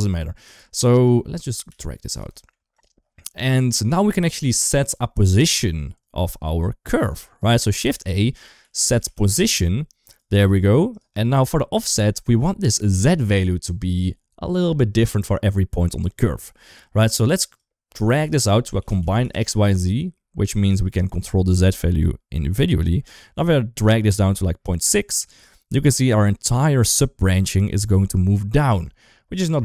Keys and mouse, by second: 0.7 click, 1.2 middle click, 1.5 g, 2.5 click, 3.4 shift+middle click, 3.8 shift+middle click, 4.9 shift+middle click, 5.8 click, 6.3 click, 7.5 middle click, 7.7 shift+a, 10.2 g, 11.1 shift+middle click, 17.3-20.5 drag, 21.4-26.2 shift+drag, 27.1 shift+middle click, 27.8 shift+middle click, 28.7 click.